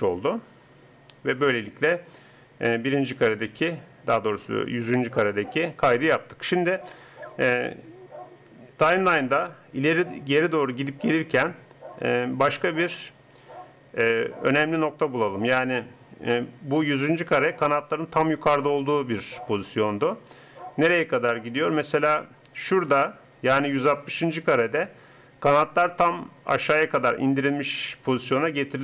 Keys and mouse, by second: 2.8-4.2 drag, 9.2-10.2 drag.